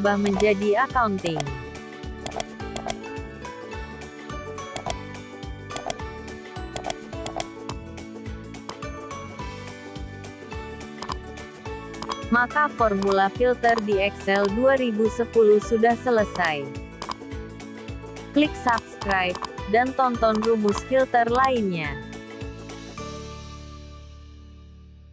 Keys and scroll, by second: 3.6 ctrl+1.